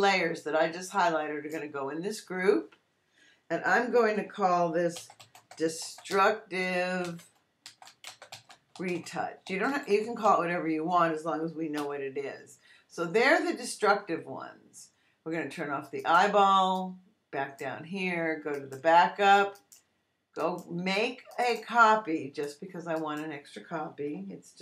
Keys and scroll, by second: 4.7-10.7 typing, 11.7 Return.